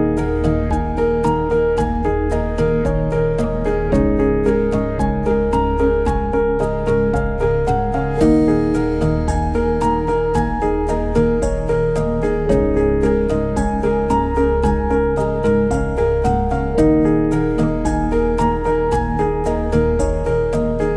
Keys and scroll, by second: 3.0 b.